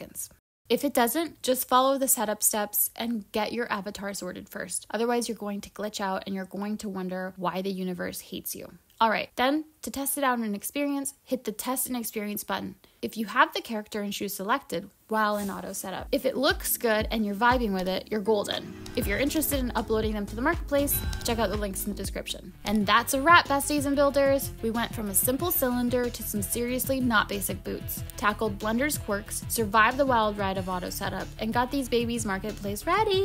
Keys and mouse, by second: 29.1 g.